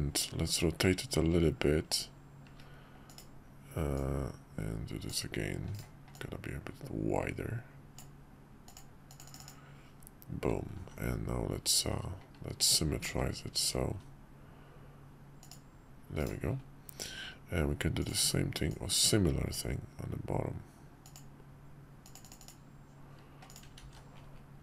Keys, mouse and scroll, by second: 3.9-5.1 drag, 6.1-8.0 drag, 10.8 alt+x, 12.6 click, 15.4-16.8 drag, 18.0 click, 18.7-19.5 drag, 23.5 click, 23.8 alt+x.